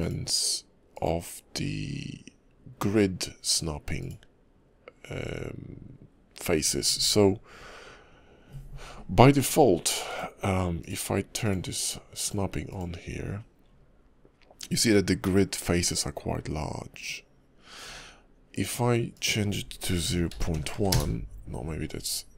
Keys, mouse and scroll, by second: 0.0 click, 11.4 click, 12.2 click, 12.7 click, 18.5 click.